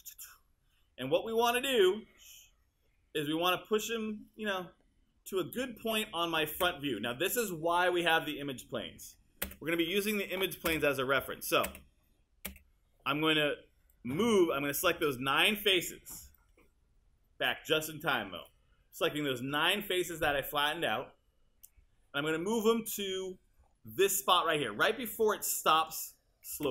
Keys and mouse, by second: 6.6 space, 9.5 space, 14.9 space, 26.5 space.